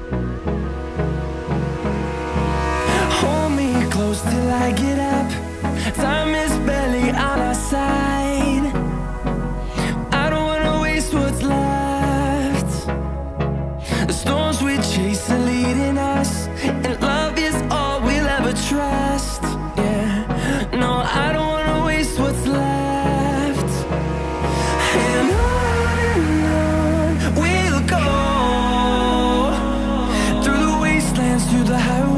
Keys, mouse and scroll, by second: 0.2-0.8 scroll down 1, 3.5 typing, 5.1 typing, 12.9 double click, 15.6 1, 16.3 Return, 17.0-17.4 scroll down 10, 17.4 scroll up 1, 17.5 middle click, 18.0-18.4 scroll up 4, 18.4-19.5 scroll down 3, 18.6 middle click, 21.9 double click, 22.6-23.0 typing, 25.0-25.3 scroll down 1, 25.3 middle click, 27.7 scroll down 1, 27.8 middle click.